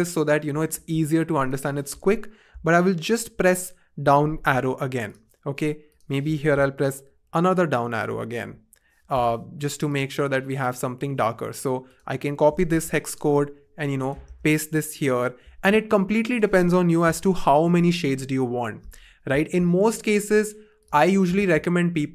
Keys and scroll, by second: 3.3 shift+Page_Down, 7.1 shift+Page_Down, 8.0 shift+Page_Down, 8.4 shift+Page_Down, 12.7 super+c, 14.2 super+v, 15.0 Return, 17.6 shift+Page_Down, 17.8 shift+Page_Down, 17.9 shift+Page_Down, 21.3 v.